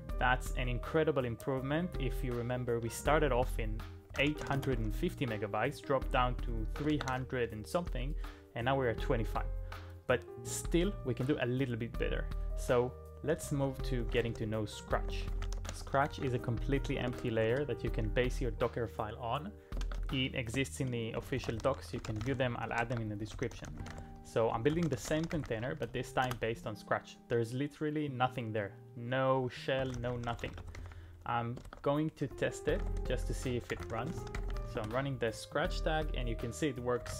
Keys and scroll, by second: 2.7 typing, 3.9-5.0 typing, 6.9 ctrl+a, 7.1 typing, 13.1-17.9 typing, 19.9 ctrl+a, 20.9-26.3 typing, 22.9 ctrl+e, 29.6-35.3 typing, 31.7 ctrl+e, 36.8-37.1 typing.